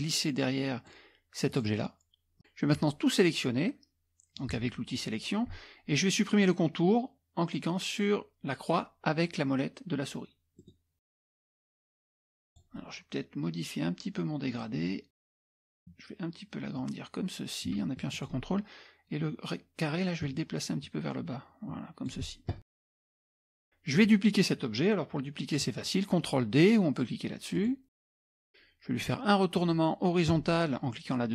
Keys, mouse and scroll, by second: 1.5 click, 2.8-4.7 drag, 10.6 middle click, 10.6 scroll up 1, 11.4 click, 11.6-12.1 scroll down 1, 12.1 click, 15.2 click, 16.8-18.4 drag, 20.2-22.2 ctrl+drag, 23.3 click, 27.6 click.